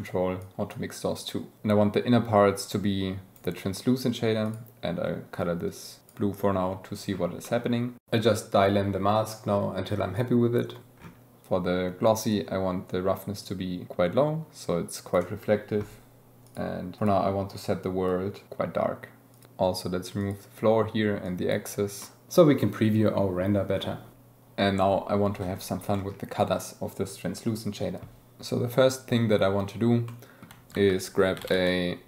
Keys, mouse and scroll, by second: 1.3-3.4 drag, 4.5 click, 7.5 click, 8.1 click, 8.8 click, 9.3 click, 10.4 click, 12.3-15.2 drag, 16.5 click, 17.0 click, 19.3 alt+a, 20.2-21.9 drag, 22.0-23.4 drag, 25.9 click, 30.1 click.